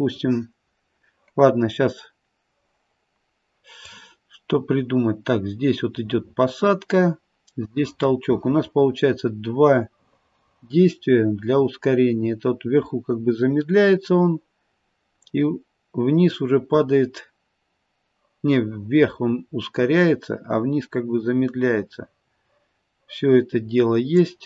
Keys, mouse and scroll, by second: 3.9 click.